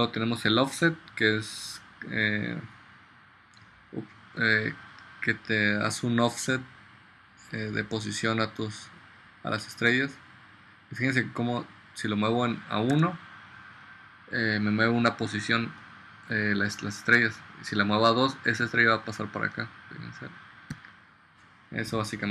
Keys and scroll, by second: 13.1 1, 20.9 2.